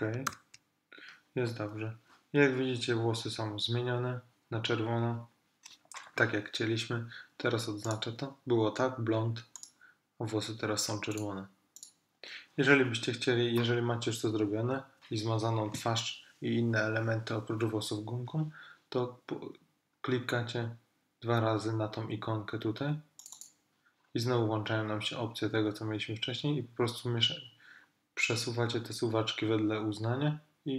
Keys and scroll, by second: 0.4 super+-.